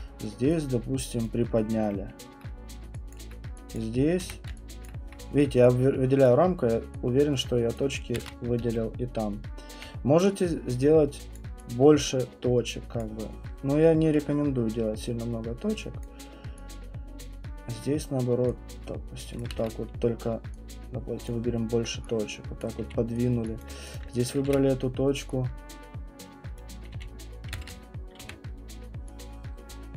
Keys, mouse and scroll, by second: 1.2 click, 2.1 alt+middle click, 3.1 alt+click, 3.7 click, 4.2 w, 4.8 click, 6.3 click, 7.8 click, 8.2 ctrl+z, 8.6-9.7 typing, 9.7 middle click, 11.4 click, 12.0 alt+click, 13.0 click, 16.0 click, 17.2 click, 19.4 click, 19.5 ctrl+z, 21.2 click, 22.6 click, 22.8 q, 23.2 click, 23.9 click, 24.5 w, 26.6 click, 26.9 q, 27.5 ctrl+z, 28.2 w.